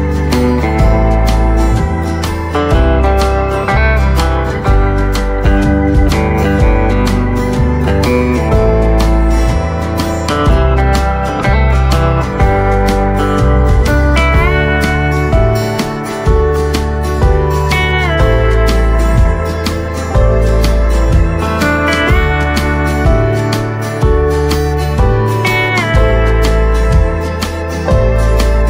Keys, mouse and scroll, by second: 6.8 click, 12.7 right click, 14.3 click, 16.5-16.8 scroll down 1, 16.8 click, 17.2-17.5 scroll up 1, 17.5 click, 19.1-20.9 alt+drag.